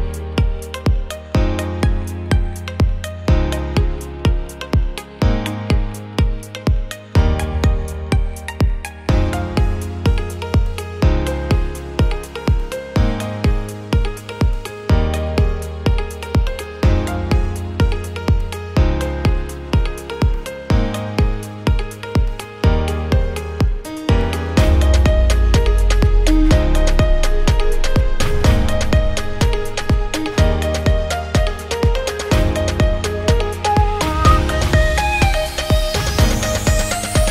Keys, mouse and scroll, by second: 0.4 click, 0.8-2.4 drag, 3.9 shift+a, 4.9 s, 5.4 click, 6.0 g, 6.3 z, 6.8 click, 7.4 ctrl+click, 8.2 alt+click, 9.2 r, 9.5 x, 10.2 click, 11.2 shift+s, 12.6 click, 13.8 alt+click, 14.0 alt+middle click, 14.3 ctrl+click, 14.8 ctrl+middle click, 15.0 ctrl+click, 15.9 shift+a, 17.6 click, 19.1 click, 21.7-23.2 drag, 23.0 middle click, 23.2 middle click, 23.6 click, 23.7 click, 24.3 click, 25.0 click, 26.3 click, 27.1 click, 28.1 click, 29.0 click, 31.1 click, 31.6-32.7 ctrl+drag, 33.4 alt+click, 36.3 ctrl+s.